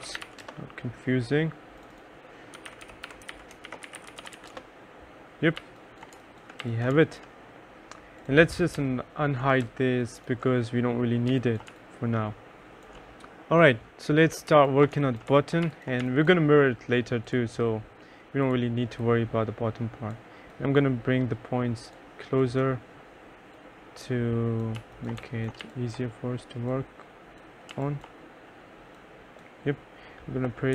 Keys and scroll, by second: 0.0-0.7 typing, 2.4-7.5 typing, 11.4 2, 11.8 3, 14.3-16.6 typing, 24.6-26.2 typing.